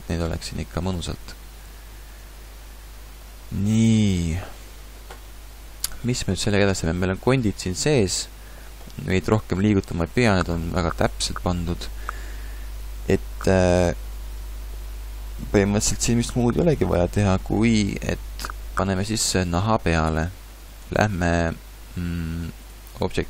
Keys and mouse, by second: 0.1 a, 21.0 ctrl+Tab.